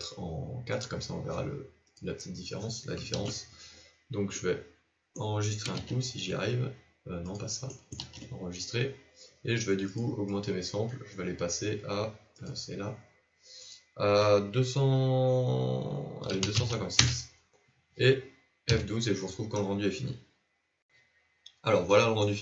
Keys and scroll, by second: 6.1 ctrl+shift+s, 8.4 ctrl+s.